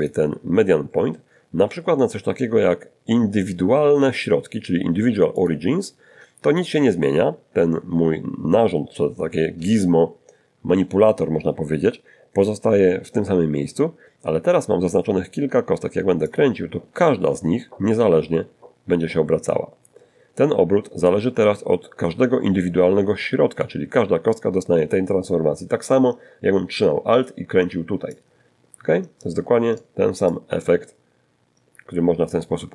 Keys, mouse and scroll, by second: 3.6 click, 14.5-22.0 drag, 26.3-28.2 alt+drag, 28.5-30.8 alt+drag, 32.2 click.